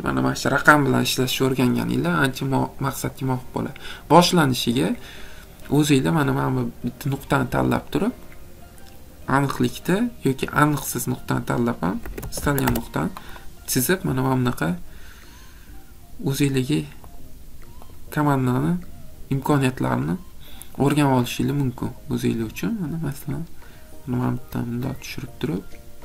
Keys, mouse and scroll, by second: 3.3 click, 5.2 middle click, 11.8-12.7 typing, 16.4 click, 17.2 click, 19.7 click, 20.9 click.